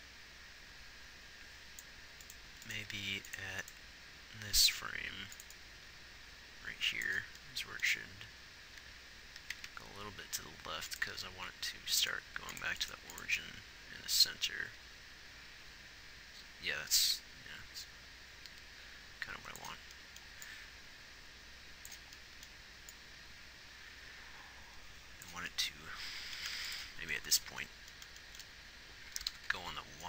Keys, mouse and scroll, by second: 2.9 g, 7.6-9.4 middle drag, 9.4 g, 13.0 x, 20.2 middle click, 26.6 ctrl+s, 29.1 g.